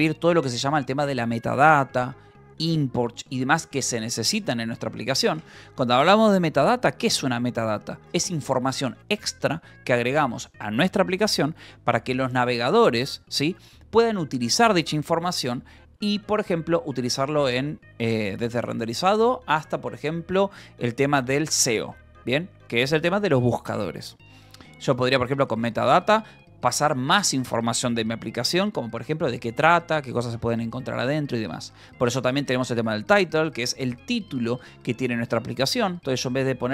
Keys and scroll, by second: 5.4 Escape, 5.6 k, 7.2 shift+v, 22.7 Escape, 24.3 j, 24.6 k, 25.5 j, 26.1 Escape, 32.5 shift+v, 33.3 Escape, 34.9 l, 36.1-36.7 typing.